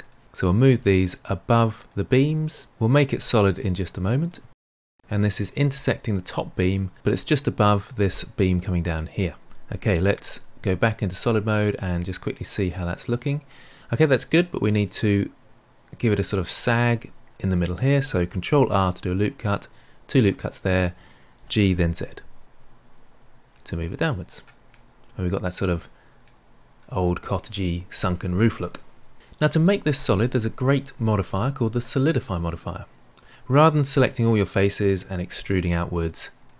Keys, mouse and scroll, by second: 0.4 click, 0.7 g, 2.4 click, 2.7 g, 3.8 click, 4.2 g, 11.2 click, 11.6-14.6 middle drag, 18.5 ctrl+r, 21.3 g, 24.6-27.7 middle drag, 34.1 a, 35.3 e.